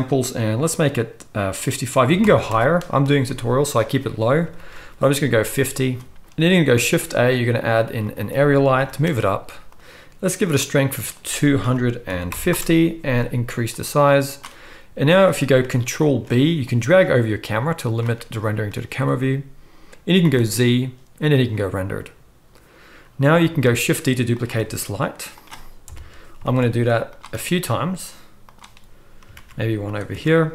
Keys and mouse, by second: 4.6 ctrl+s, 6.7 shift+a, 8.7 g, 9.7-11.1 middle drag, 11.1-24.4 drag, 16.0 ctrl+b, 20.2 z, 23.6 shift+d, 24.4-26.5 middle drag, 24.5 r, 25.8 KP_7, 26.5 shift+d, 27.3 r, 29.3 shift+d, 30.1 r.